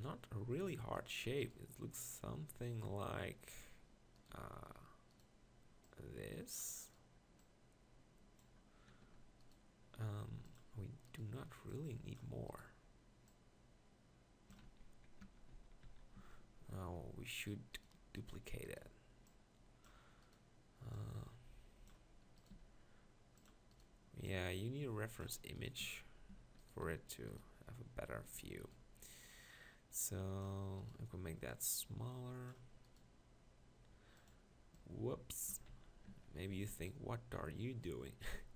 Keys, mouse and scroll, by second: 1.5 right click, 4.3 g, 9.0 e, 10.3 x, 14.6 z, 15.2 Tab, 15.5 z, 15.8 z, 16.2 Tab, 16.8 Tab, 22.5 g, 25.8 Tab, 26.3 Tab, 26.8 e, 28.4 g, 35.5 Tab, 35.7 z, 36.1 Tab, 38.3 Tab.